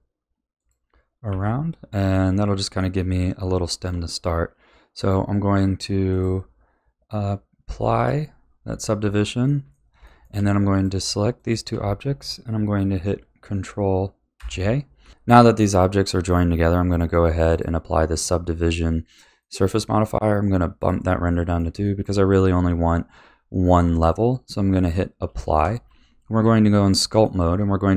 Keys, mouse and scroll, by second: 1.3 a, 1.7-2.1 scroll down 2, 2.1-3.4 middle drag, 3.4 Tab, 6.1 click, 7.9 click, 8.7 scroll down 2, 9.0 a, 9.4-10.7 middle drag, 10.7 click, 11.3 shift+click, 14.4 ctrl+j, 15.0 a, 15.6-17.5 middle drag, 17.5-19.4 drag, 19.4-20.7 middle drag, 20.7 drag, 21.3-24.7 middle drag, 24.7 click, 25.4-25.8 shift+middle drag, 25.8 Tab, 26.4 b, 26.9 middle click, 27.5-27.9 scroll up 2.